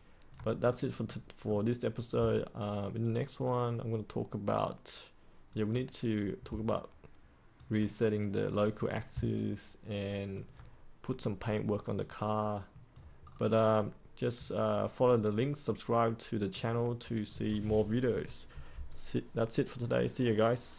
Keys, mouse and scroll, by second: 0.5 scroll down 1, 1.0 middle click, 2.2-5.4 alt+drag, 6.6 alt+click, 9.3 alt+click, 11.9 click, 13.2-15.3 scroll up 1, 15.3-16.6 drag.